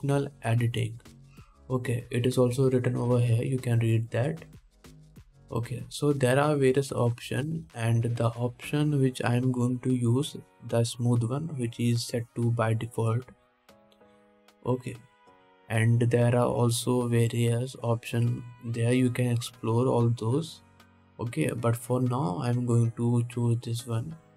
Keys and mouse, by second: 7.0-24.3 drag.